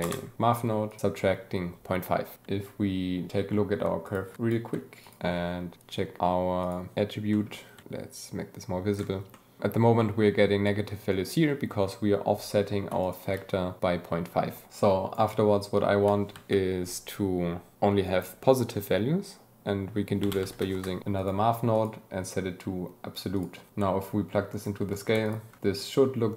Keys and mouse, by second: 0.9 click, 4.0 ctrl+shift+click, 5.0 ctrl+shift+click, 5.8-7.0 drag, 7.3 click, 7.8-8.9 shift+drag, 9.3 drag, 13.0 ctrl+shift+click, 14.7 click, 16.3 shift+a, 21.1 click, 21.7-23.5 drag, 23.7 g, 24.0-24.6 drag, 25.7-26.3 ctrl+shift+drag.